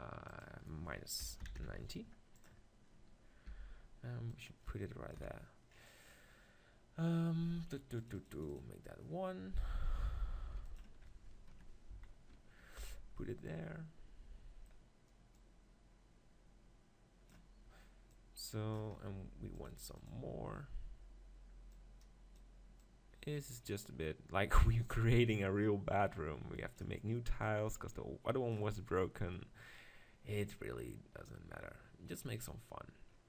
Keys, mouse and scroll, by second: 0.3-2.1 drag, 2.8-4.4 middle drag, 3.5 g, 4.4 click, 5.1 KP_7, 9.6 g, 10.2 right click, 10.4 click, 10.8 click, 11.9 z, 12.6 middle click, 12.9 z, 15.3-17.3 drag, 18.1-19.8 middle drag, 19.8-20.8 drag, 20.8-24.6 middle drag, 24.6 click, 27.4-29.3 drag, 29.3-30.5 middle drag.